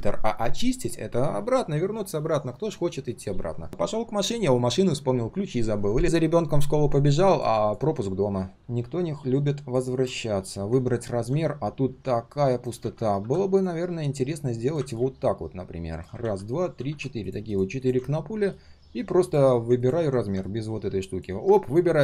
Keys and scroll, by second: 12.8 ctrl+z, 16.2 ctrl+d, 16.7 ctrl+d.